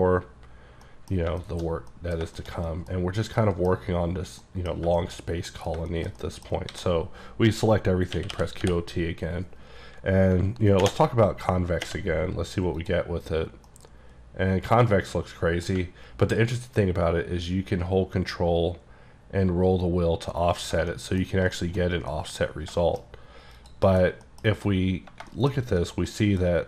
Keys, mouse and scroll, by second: 0.9 middle click, 1.4 shift+middle click, 1.5 shift+middle click, 1.6-2.4 shift+scroll down 4, 2.4 shift+middle click, 3.7 middle click, 5.0 shift+middle click, 5.2 middle click, 5.8 shift+middle click, 6.1 middle click, 6.7 a, 8.2-8.6 typing, 12.8 click, 13.7-15.9 middle drag, 16.3-19.5 ctrl+scroll down 10, 19.5-19.8 ctrl+scroll down 1, 20.6 click, 20.9 shift+middle click, 21.2 shift+scroll down 1, 21.6 shift+middle click, 21.8-22.2 shift+scroll down 2, 22.2 middle click, 22.5 scroll up 1, 22.8 shift+middle click, 23.1-23.6 scroll up 2, 23.6 click, 23.9 KP_Decimal, 24.3 middle click, 24.5-25.0 scroll up 10, 25.3 shift+middle click, 25.5 shift+scroll down 2, 25.8 middle click, 26.5-26.6 scroll up 2.